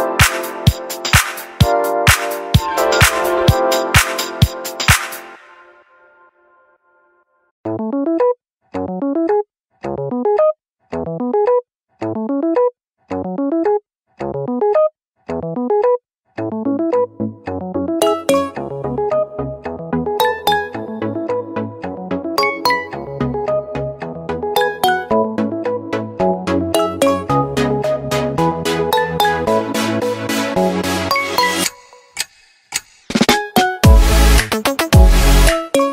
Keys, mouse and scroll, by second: 1.7 super+z.